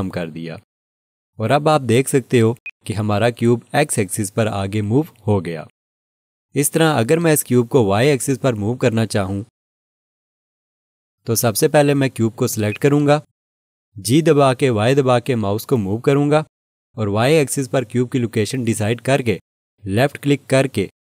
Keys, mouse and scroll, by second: 2.6 click, 12.7 click, 14.5 g, 15.3 y.